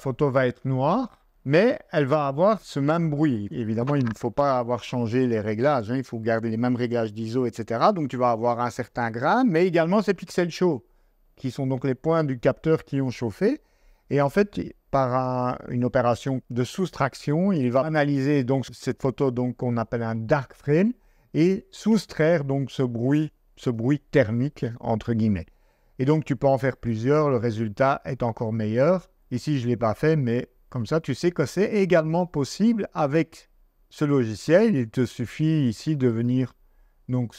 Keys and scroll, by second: 30.0 super+Tab.